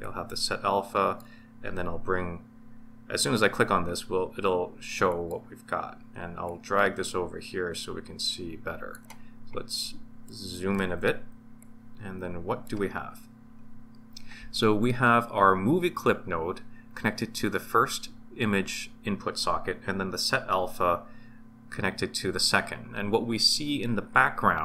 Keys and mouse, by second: 0.0-1.3 drag, 5.0 click, 6.4-9.0 drag, 10.7 shift+b.